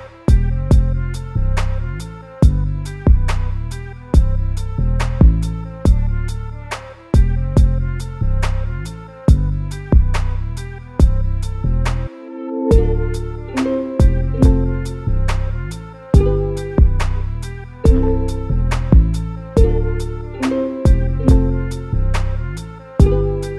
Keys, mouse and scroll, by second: 0.4 scroll up 1, 0.8-4.0 middle drag, 6.0 shift+click, 6.2 shift+click, 7.8 shift+click, 7.9 shift+click, 10.5 shift+click, 11.5-13.7 middle drag, 13.7 shift+click, 13.8 shift+click, 17.4 shift+click, 17.6 shift+click, 19.5-21.7 middle drag, 21.7 ctrl+i, 22.2 x, 23.3 Tab.